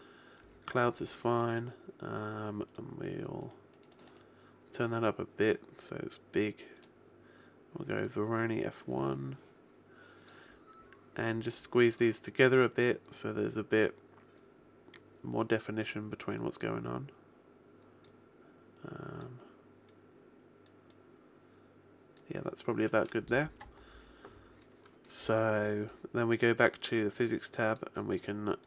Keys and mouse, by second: 5.6 click, 6.4 middle click, 6.8 click, 8.8-10.2 middle drag, 10.2-14.8 drag, 16.0 middle click, 16.4 click, 18.4 middle click, 18.8-22.0 drag, 22.6-26.6 middle drag.